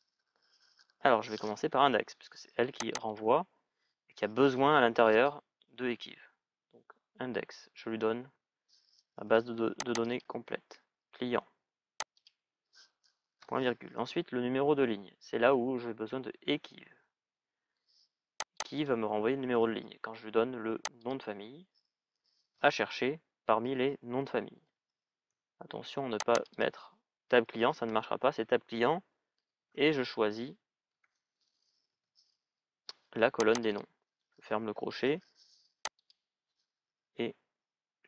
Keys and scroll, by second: 16.2 shift+e, 16.7 shift+q, 30.7 BackSpace.